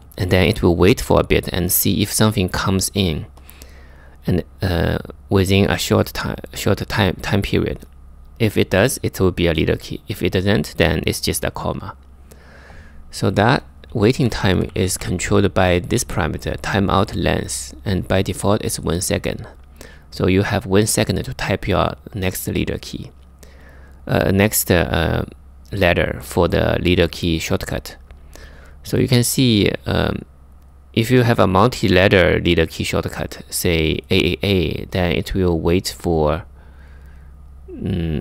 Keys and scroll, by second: 13.9 k, 14.0 k, 14.1 k, 14.3 k, 16.6 typing.